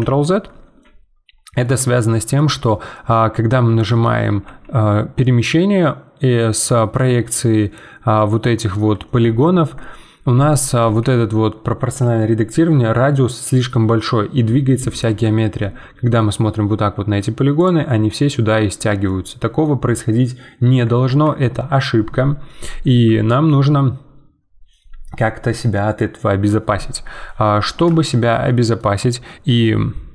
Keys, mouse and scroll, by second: 0.8-4.4 middle drag, 4.4 g, 15.3 scroll down 1, 15.6 middle click, 16.5 g, 17.9-21.1 middle drag, 21.1 ctrl+z, 22.5-26.4 middle drag, 27.5-28.0 scroll up 2, 28.0-30.1 shift+middle drag.